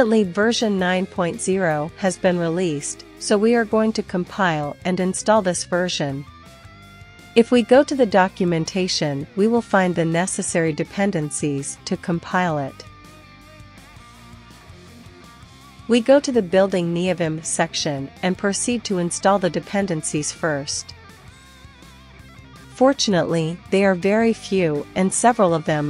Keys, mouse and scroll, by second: 0.5 click, 0.9-2.3 scroll down 1, 2.3 click, 3.3 click, 10.8 scroll down 1, 11.2-12.4 middle drag, 12.8 click, 20.4 click, 22.1 ctrl+c, 22.1 ctrl+l, 22.5 ctrl+shift+v, 23.9 Return, 25.5 y, 25.6 Return.